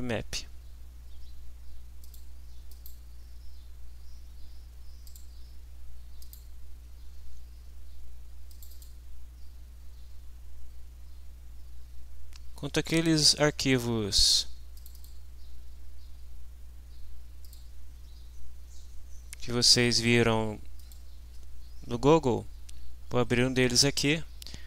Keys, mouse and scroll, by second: 2.0 click, 2.7 click, 5.1 click, 6.2 click, 8.5 click, 9.5-10.9 scroll down 4, 12.0-12.8 scroll down 4, 13.0-13.3 scroll down 2, 13.6-13.9 scroll down 2, 14.1 scroll down 2, 14.7 click, 17.4 click, 20.8 click.